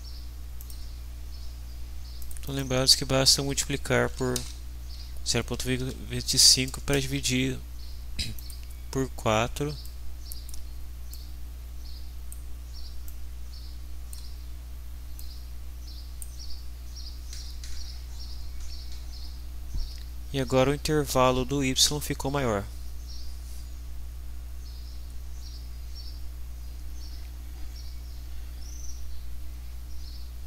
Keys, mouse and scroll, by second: 0.6 click, 2.2 click, 3.8-5.8 typing, 6.9 Return, 8.4 click, 9.8-10.7 drag, 11.1-12.5 drag, 13.0-14.3 drag, 15.2-16.4 drag.